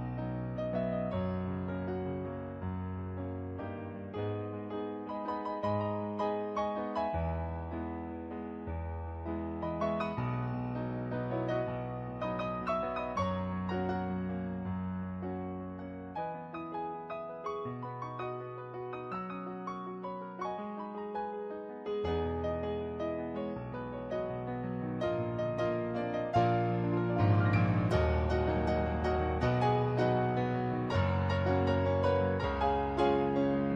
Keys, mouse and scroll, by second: 1.1 ctrl+z, 2.5 ctrl+z, 3.9 ctrl+z, 5.5 ctrl+z, 6.5 ctrl+z, 7.1 ctrl+z, 9.3 ctrl+z, 10.0 ctrl+z, 10.8 ctrl+z, 11.7 ctrl+z, 12.2 ctrl+z, 14.2 ctrl+z, 15.6 ctrl+z, 16.7 ctrl+z, 18.0 ctrl+z, 18.4 ctrl+z, 20.4 ctrl+z, 22.4 ctrl+z, 23.0 ctrl+z, 23.6 ctrl+z, 24.0 ctrl+z, 25.2 ctrl+z, 29.1 ctrl+z, 29.4 ctrl+z, 31.2 ctrl+z, 31.6 ctrl+z.